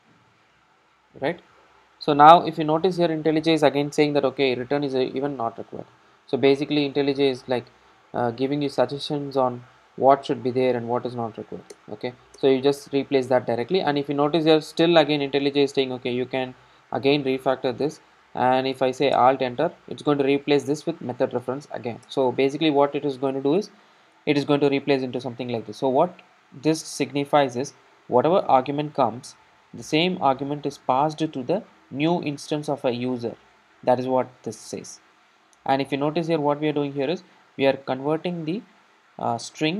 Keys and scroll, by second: 1.1 super+s, 11.8 alt+Return, 19.2 alt+Return.